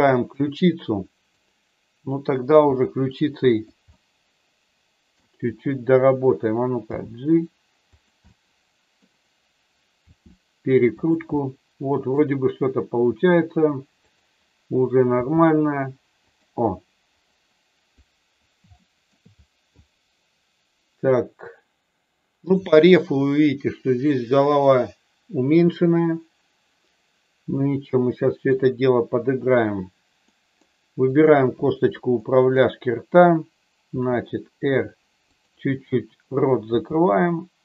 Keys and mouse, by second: 0.4 middle click, 2.6 r, 3.5 click, 3.9-5.1 middle drag, 7.0 g, 8.2 middle click, 10.0 r, 10.9 click, 11.3 middle click, 14.0 click, 15.1 g, 16.2 click, 18.8 shift+middle click, 22.6 shift+middle click, 27.5-28.5 middle drag, 30.2 middle click, 32.1 middle click, 33.7 r, 36.6 g.